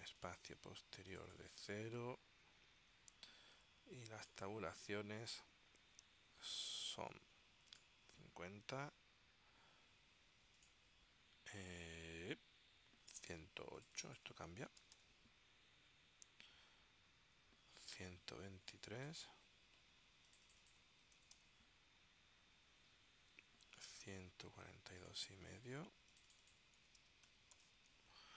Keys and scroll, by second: 3.0 0, 3.8 Tab, 14.6-15.6 typing, 17.4 Tab, 20.9-22.0 typing, 23.5 Tab, 26.7-28.3 typing.